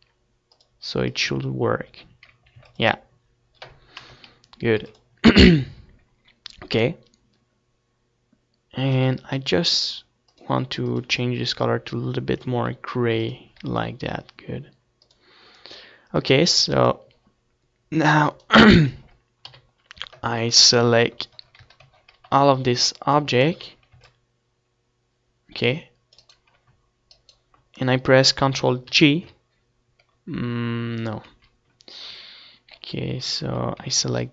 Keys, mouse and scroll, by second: 0.7-2.5 drag, 2.7 ctrl+s, 4.5 KP_0, 4.9 ctrl+s, 10.3-12.8 drag, 13.3 ctrl+s, 15.2-17.2 drag, 18.4 click, 19.0 ctrl+s, 19.8 click, 19.8 KP_7, 20.8 z, 21.9 a, 22.4 c, 23.6-28.9 right drag, 24.1 c, 29.0 ctrl+j, 31.5 ctrl+z, 33.8 middle click.